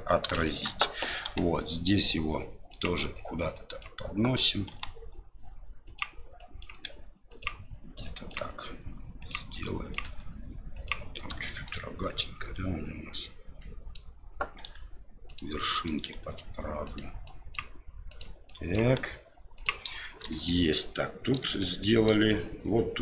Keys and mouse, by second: 0.4 shift+middle click, 1.2 g, 3.4 click, 4.7 g, 6.4 click, 6.7 g, 8.0 click, 9.6 click, 9.6 g, 10.0 g, 11.4 shift+middle click, 13.6 click, 14.6 g, 15.6 click, 16.0 g, 17.3 click, 18.5 click, 18.5 g, 18.8 g, 20.3 shift+middle click, 21.6 shift+middle click.